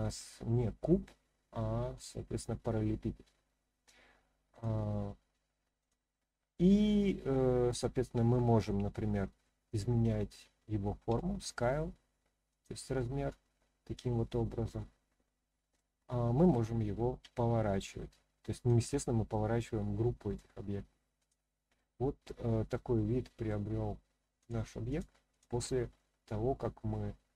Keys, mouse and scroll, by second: 2.0 click, 4.5 click, 5.8 click, 6.5-7.8 middle drag, 12.5 click, 12.9-15.7 middle drag, 17.2 r, 18.5 click, 18.9 scroll up 1, 19.0-20.3 middle drag, 21.2 click, 21.7-23.5 middle drag, 24.4-25.0 drag, 25.3 click, 25.9-27.3 middle drag.